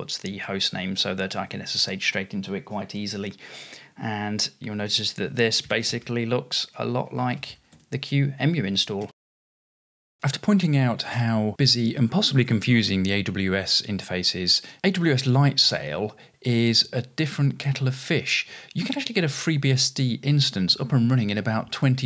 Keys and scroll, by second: 0.0-1.1 typing, 7.8-10.4 typing.